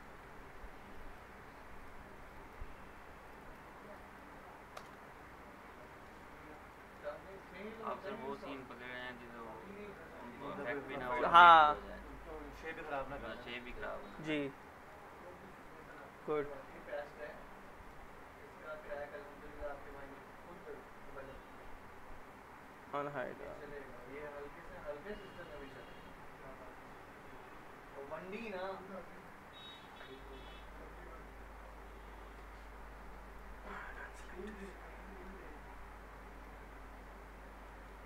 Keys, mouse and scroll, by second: 0.2 scroll up 1, 0.9 click, 1.8 ctrl+click, 4.7 ctrl+BackSpace, 5.2 scroll up 1, 5.4-5.8 scroll down 1, 5.8 alt+middle click, 7.0 scroll down 1, 7.3-8.2 middle click, 8.2 scroll up 1, 8.6-9.2 alt+middle click, 9.2 scroll up 1, 9.7 scroll down 1, 10.0 alt+middle click, 10.7-11.5 scroll down 1, 11.5 middle click, 13.1-13.5 scroll down 1, 13.5 alt+middle click, 13.5 alt+middle click, 14.3 scroll up 1, 14.6 middle click, 15.1-15.5 scroll up 1, 15.6 alt+middle click, 16.0-16.4 scroll down 1, 16.7 alt+middle click, 17.1 scroll up 1, 17.6 middle click, 19.8 click, 22.6 click, 23.0 scroll down 1, 23.3 alt+middle click, 23.6 scroll up 1, 23.9 click, 24.2 alt+q, 28.4 click, 33.3 click, 33.7 alt+middle click, 34.1 scroll up 1, 34.4-35.4 alt+middle drag, 36.4 click, 36.9 scroll up 1, 37.6 scroll down 1, 37.7 alt+middle click.